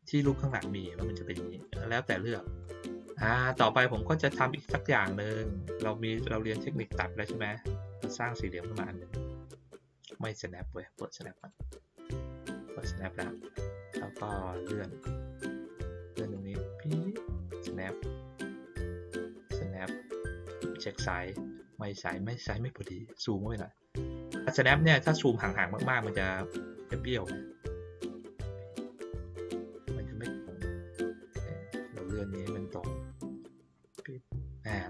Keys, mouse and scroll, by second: 0.4-1.6 drag, 2.6-3.0 drag, 3.5 click, 4.6 click, 6.7-9.7 drag, 11.3 click, 14.5 click, 16.3-17.7 drag, 18.8-19.9 drag, 22.8-23.9 ctrl+middle drag, 22.8 ctrl+scroll, 24.1-24.6 middle drag, 27.2-28.6 drag, 30.3-31.3 drag, 32.6-33.6 drag.